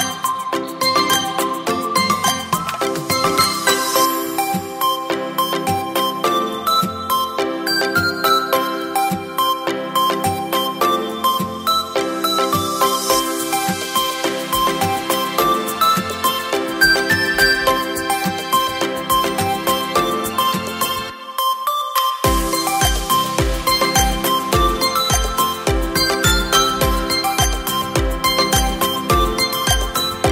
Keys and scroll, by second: 1.9 v, 21.0 Up, 21.2 Up, 21.2 Up, 21.4 Up.